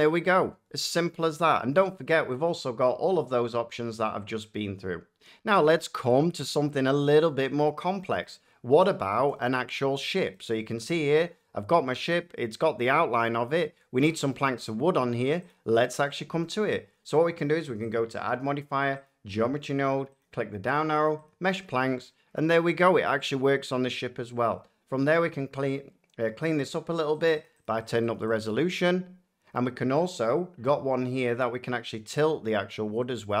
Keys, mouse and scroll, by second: 0.3 middle click, 1.4 shift+middle click, 2.0 shift+middle click, 6.0 shift+middle click, 7.2 middle click, 7.7 shift+middle click, 8.2 middle click, 9.4 shift+middle click, 9.4 shift+scroll, 10.7 middle click, 12.4 middle click, 13.1-13.5 scroll, 14.2 shift+scroll, 15.4 click, 16.5 shift+middle click, 17.8 click, 19.0 click, 20.1 click, 21.2 click, 23.0 middle click, 23.4 shift+middle click, 27.1 click, 27.4 click, 27.6 click, 27.8 click, 28.0 click, 28.3 click, 29.5 middle click.